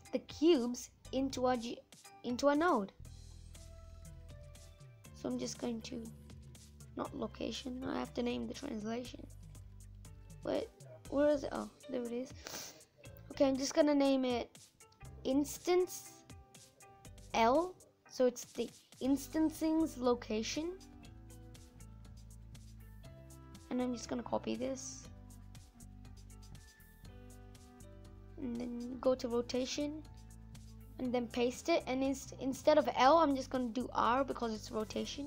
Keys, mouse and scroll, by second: 11.1 click, 26.0 click.